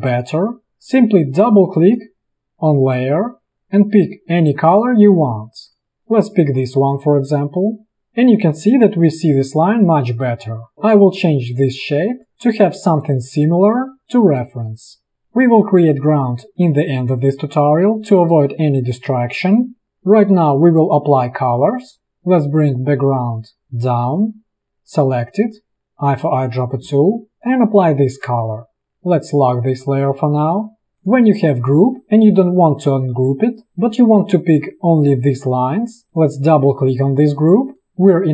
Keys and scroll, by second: 11.9 space, 28.0 v.